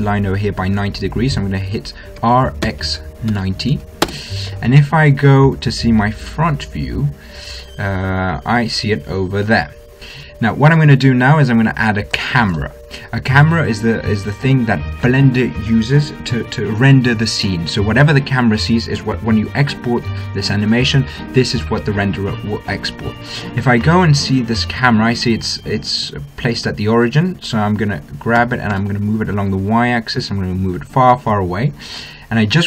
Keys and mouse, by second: 2.4 r, 12.6 shift+a, 24.2-28.9 middle drag, 28.6 g.